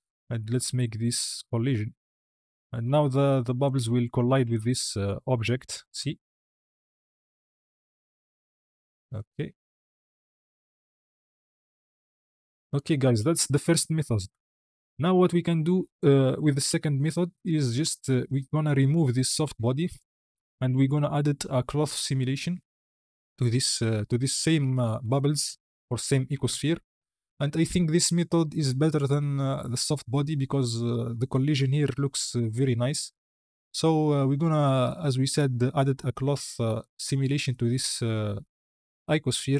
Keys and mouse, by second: 1.6 click, 3.5 click, 4.4 click, 5.3 space, 7.7 click, 14.1 space, 14.9 click, 15.9-16.3 drag, 17.2 KP_1, 19.7 click, 21.8-22.5 drag, 26.3 KP_1.